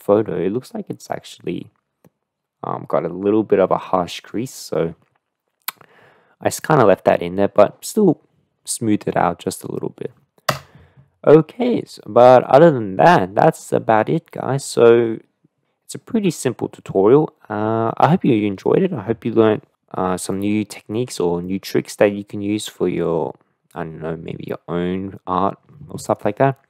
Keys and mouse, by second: 11.5 KP_0, 12.5-13.6 middle drag, 14.7-15.6 middle drag, 18.0-18.7 middle drag, 20.5-21.1 middle drag, 21.5-22.9 middle drag.